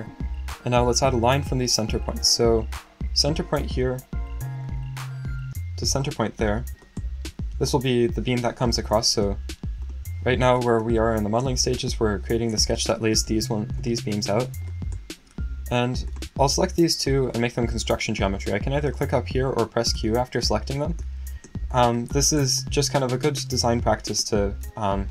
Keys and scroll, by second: 7.2 Escape, 19.9 q.